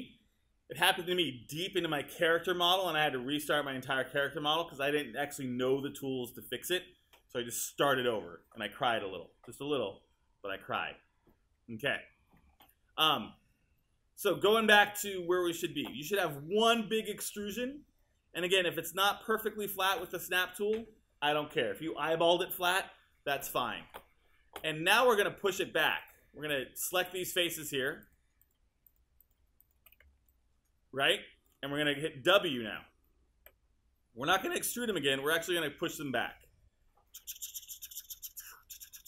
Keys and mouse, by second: 33.4 w.